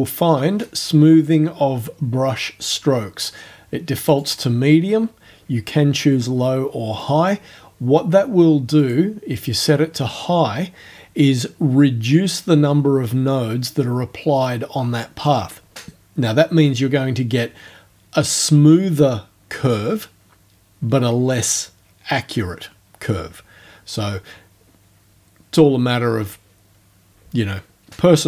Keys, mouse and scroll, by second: 4.1 click, 7.0 click, 8.8 click.